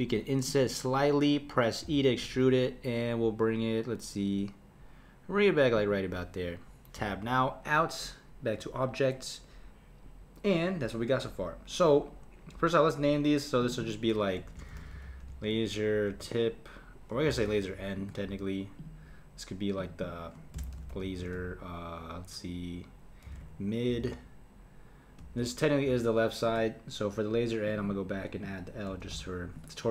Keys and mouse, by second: 1.8 e, 7.0 Tab, 13.6 click, 13.8-17.0 drag, 18.8 click, 19.8 click, 20.0-23.2 drag, 27.6 click, 27.8-29.9 drag.